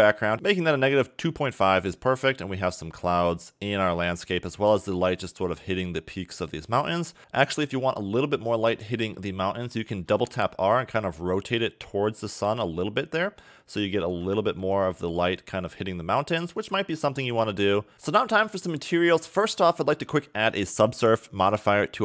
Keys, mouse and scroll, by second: 7.2 click, 10.1 r, 14.4 g, 17.0 e, 17.2 r, 17.9 click, 20.7 click.